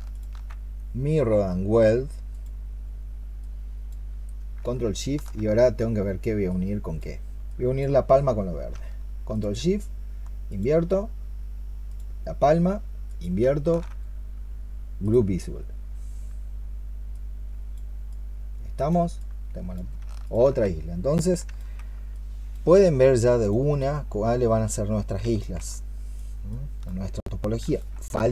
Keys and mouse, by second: 0.0 ctrl+shift+click, 9.2 ctrl+shift+click, 10.3 ctrl+shift+click, 11.7 ctrl+shift+click, 12.9 ctrl+shift+click, 20.1 ctrl+shift+click, 23.6 double click, 25.6 alt+click, 26.4 alt+click.